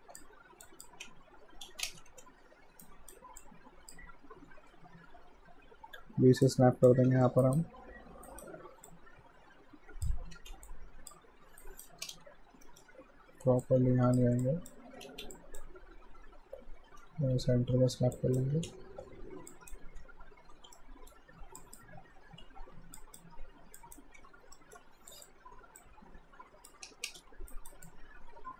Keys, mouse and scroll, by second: 0.4-1.0 typing, 0.6 click, 1.7 ctrl+z, 1.8 ctrl+space, 2.1 f, 2.8 alt+right click, 3.4 alt+click, 6.0-6.8 typing, 6.5 click, 7.5 alt+right click, 8.9 alt+click, 10.4 ctrl+z, 10.7 alt+click, 11.6 alt+right click, 12.1 space, 12.7 alt+middle click, 13.6 click, 15.1 ctrl+z, 15.3 click, 16.9-19.9 typing, 18.2 click, 19.5 click, 20.8 alt+middle click, 21.6 click, 22.7-24.1 typing, 23.0 click, 23.8 click, 24.6 alt+middle click, 25.1 click, 25.4 w, 25.8 click, 26.9 space, 27.6 alt+right click, 27.9 alt+click.